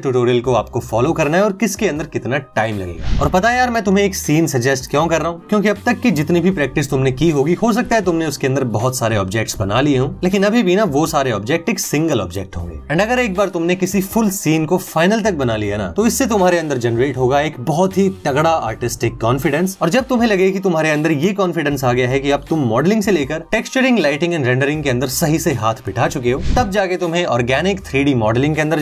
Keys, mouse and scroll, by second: 3.3 click, 5.1 middle click, 5.9 shift+middle click, 6.3 middle click, 8.1 click.